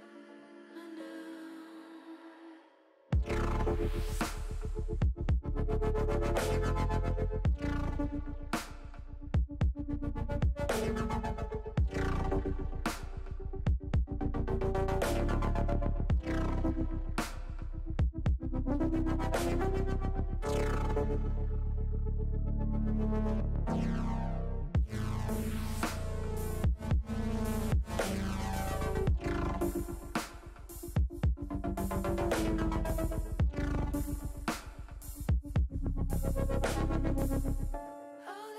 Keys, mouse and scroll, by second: 3.1 ctrl+r, 5.3 click, 7.4 click, 8.2 ctrl+r, 13.1 click, 14.3 ctrl+r, 16.9 click, 19.2 click, 22.3 click, 26.0 click, 27.7 click, 29.1-31.1 middle drag, 31.5 middle click, 33.2 click, 33.8 middle click, 38.0 middle click.